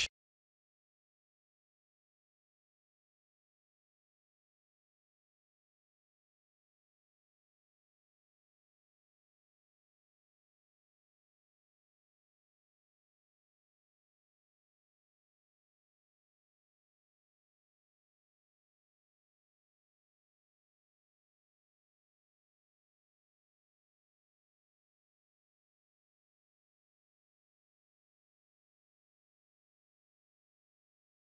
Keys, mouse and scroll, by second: 0.0 click, 8.6-10.7 drag, 12.9-14.3 drag, 17.6-19.9 middle drag, 21.0-21.5 shift+middle drag, 22.4 middle click, 28.0 click, 28.7 click.